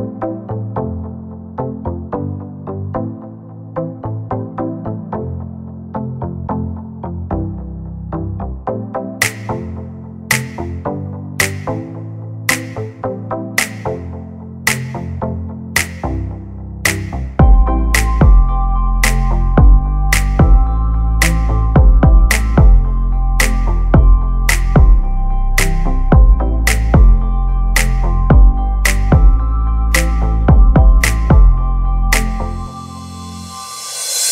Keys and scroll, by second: 0.7 r, 2.2-4.2 typing, 7.1 space, 9.2 m, 10.8 space, 11.1 p, 11.8 5, 12.1 Return, 12.3 space, 16.5 l, 18.5 1, 18.9 5, 19.1 Return, 20.6 space, 21.3 p, 25.8 space, 27.0 m, 27.6 Up, 28.5 space, 29.9 m, 31.2-33.9 typing, 33.7 Return.